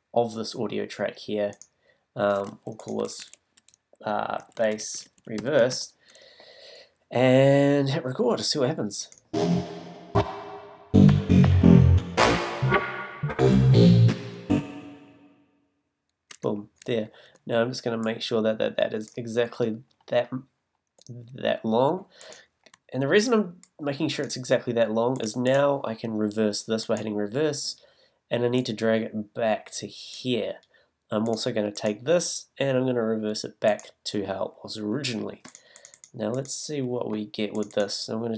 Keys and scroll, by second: 3.1 super+r, 3.7 shift+super+r, 4.4-5.9 typing, 16.3 space.